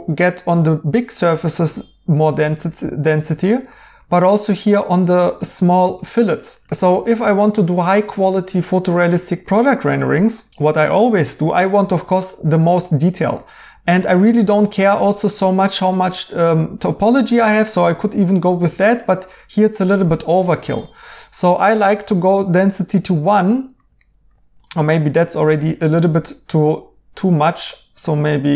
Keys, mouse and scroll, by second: 3.4 right click, 5.6 right click, 12.4 right click, 13.8 right click, 18.5 right click, 23.1 right click.